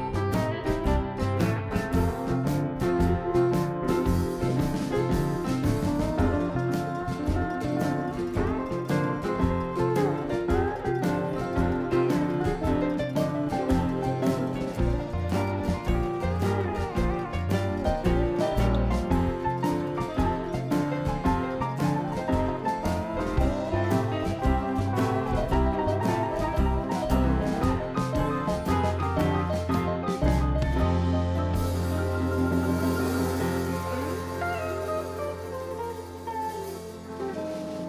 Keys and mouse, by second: 3.5-5.5 right drag, 4.2 click, 5.5 click, 5.7 right click, 5.7 click, 6.1 right click, 7.0 click, 8.1-12.5 drag, 10.3-11.4 right drag, 14.2 Tab, 14.5 click, 15.2 Delete, 16.0 Tab, 16.2 click, 16.5 Tab, 17.7-18.9 drag, 18.0-20.1 right drag, 20.1 i, 21.7 e, 23.1-24.1 drag, 24.8-25.8 drag, 25.2 right click, 25.8-27.6 middle drag, 27.6 x, 30.0 KP_7, 30.1 s, 33.3 Tab, 34.1 click.